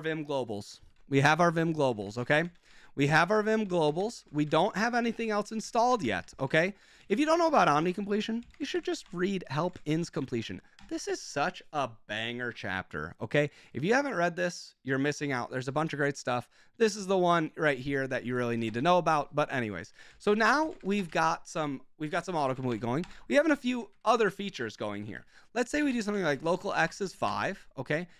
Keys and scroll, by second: 0.8 ctrl+h, 1.6 ctrl+n, 1.8 BackSpace, 2.0 BackSpace, 2.3 ctrl+x, 2.5 ctrl+o, 3.1 ctrl+w, 3.3-5.2 typing, 5.6 ctrl+x, 5.8 ctrl+o, 6.0 ctrl+n, 6.1 ctrl+n, 6.5 ctrl+n, 6.8 Escape, 6.9 Escape, 7.0-10.6 typing, 8.3 Escape, 10.7 Return, 17.9 Escape, 18.0-28.1 typing, 19.5 Escape, 19.8 Escape.